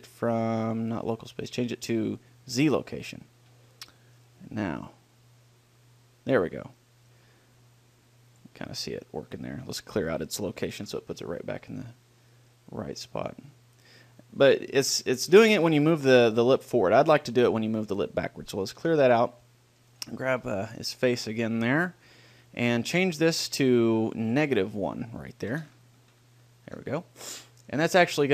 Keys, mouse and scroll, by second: 0.4 middle click, 0.9-2.9 drag, 4.3 click, 4.3 middle click, 4.5 right click, 4.9 middle click, 5.0 click, 5.1-6.3 middle drag, 5.3-6.7 drag, 9.5-11.1 middle drag, 11.1 alt+g, 11.7 middle click, 12.8-14.6 drag, 16.2-18.0 drag, 19.1 alt+g, 24.5-26.5 drag.